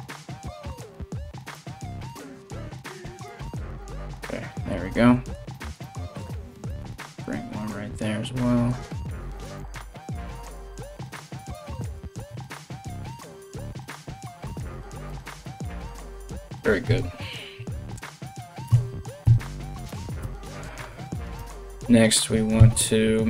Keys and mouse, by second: 2.0 ctrl+r, 3.0 Tab, 4.5 Tab, 6.1 ctrl+r, 8.9 Tab, 10.1 Tab, 11.1 ctrl+r, 12.5 ctrl+z, 13.2 ctrl+r, 15.0 Tab, 16.4 KP_1, 18.2 Tab, 18.8 a, 19.5 g, 21.0 Tab, 22.1 shift+a.